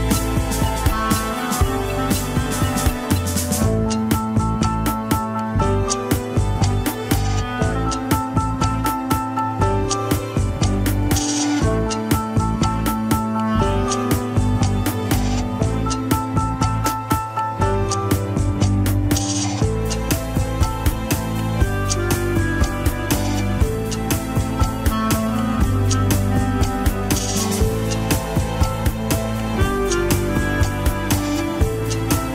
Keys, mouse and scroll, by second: 0.0 n, 1.3 click, 2.4 r, 5.5-5.9 scroll up 4, 5.9 shift+middle click, 6.1 scroll down 1, 6.9 click, 8.2 r, 13.8 middle click, 14.2 ctrl+KP_1, 15.1 click, 22.4 ctrl+Tab, 22.8 shift+click, 23.3 ctrl+Tab, 23.4 scroll up 3, 24.4 ctrl+Tab, 24.5 shift+click, 24.9 ctrl+Tab, 25.6 alt+z, 26.3 alt+z, 27.0 ctrl+Tab, 27.6 click, 28.2 shift+click, 28.5 ctrl+Tab, 29.1 alt+z, 30.2 ctrl+click, 30.3 alt+z, 30.4 scroll down 1, 30.6 middle click, 31.1 scroll down 1, 31.6 shift+z, 31.9 scroll up 2.